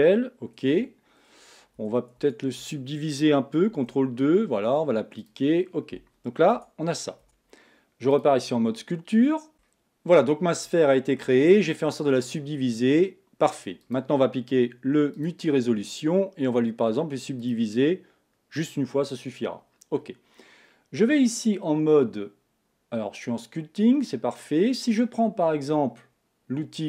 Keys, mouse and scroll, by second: 0.7 Tab, 1.7 Tab, 2.1 Tab, 2.6 Tab, 3.7 ctrl+2, 5.3 click, 6.5 Tab, 7.2 Tab, 8.1 click, 9.0-10.0 scroll up 3, 9.5 shift+middle click, 10.3-10.8 scroll up 1, 10.8-15.3 shift+middle drag, 15.3-26.8 drag.